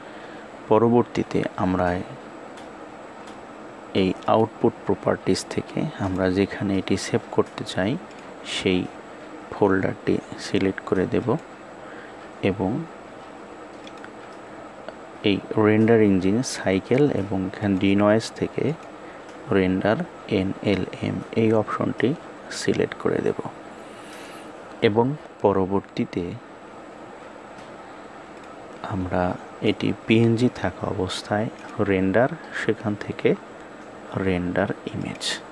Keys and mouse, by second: 17.9 click, 18.9 click, 31.8-35.5 drag.